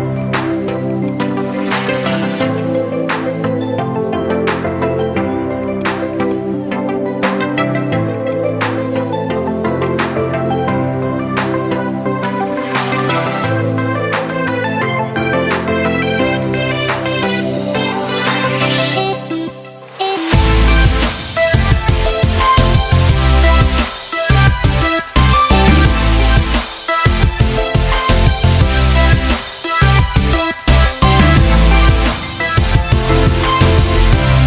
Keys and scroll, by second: 7.2 ctrl+z, 15.2 ctrl+z.